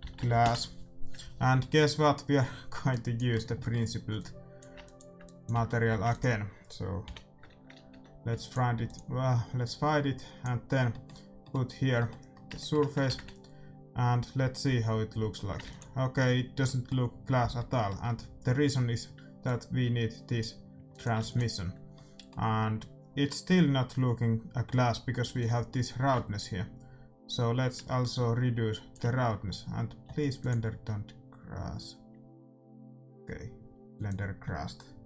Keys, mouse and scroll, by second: 0.4 s, 2.8-7.1 drag, 3.6-5.4 middle drag, 5.5 x, 5.8 shift+a, 9.6-11.3 drag, 10.8-14.8 middle drag, 14.3 shift+z, 15.7 ctrl+s, 16.7-17.9 middle drag, 19.5-22.9 drag, 21.2 ctrl+s, 22.0 middle click, 25.3-27.3 drag.